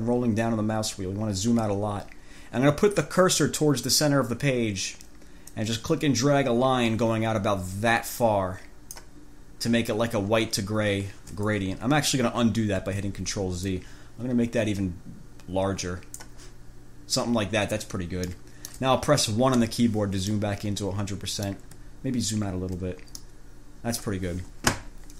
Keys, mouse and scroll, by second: 0.3-1.1 ctrl+scroll down 4, 5.7-9.4 drag, 13.1 ctrl+z, 13.9-16.7 drag, 18.5-19.1 drag, 19.8 1, 20.5-21.9 drag, 22.3 ctrl+scroll down 2, 23.5 middle click.